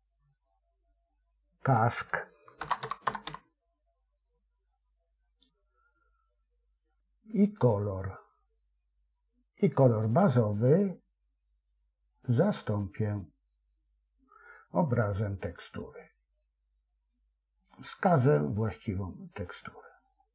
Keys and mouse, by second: 0.1 click, 0.3-4.6 drag, 9.0 click, 12.1-15.8 drag, 17.6-19.5 drag.